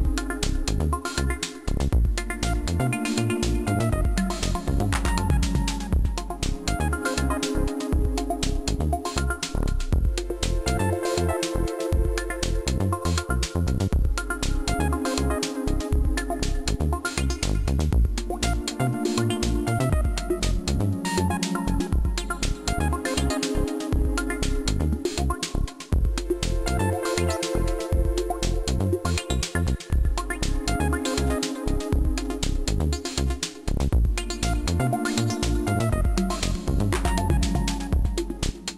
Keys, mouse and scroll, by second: 1.3 middle click, 2.1 middle click, 2.7 Tab, 3.9 Tab, 4.2 right click, 5.0 Tab, 6.8 Tab, 9.1 click, 10.8 right click, 11.4 shift+right click, 12.1 right click, 12.6 shift+right click, 13.3 middle click, 15.2 click, 17.2 right click, 17.8 shift+right click, 18.1 shift+right click, 18.4 right click, 19.1 click, 20.6 right click, 21.2 r, 23.8 click, 25.5 middle click, 27.6 middle click, 30.4 click, 31.8-33.7 scroll down 25, 34.8 click.